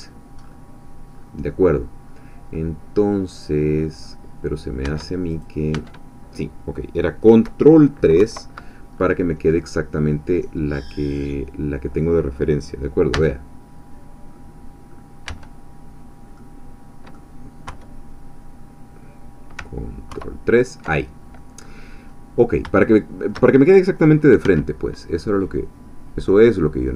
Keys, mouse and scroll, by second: 0.4-0.8 scroll up 1, 1.1 scroll up 1, 2.1-2.5 scroll down 1, 2.5-4.0 middle drag, 4.0-4.8 scroll down 1, 5.3 Tab, 5.3 click, 5.8 Tab, 8.2 ctrl+3, 9.0-9.5 ctrl+scroll up 2, 9.6-12.1 drag, 13.1 Tab, 13.9-15.0 scroll down 2, 15.0 scroll up 2, 16.4-17.6 drag, 17.6 3, 18.5-19.6 middle drag, 18.5-19.6 scroll down 2, 20.1 ctrl+3, 21.6-22.6 scroll up 2, 22.8 shift+click, 22.8 shift+middle click, 24.4 s.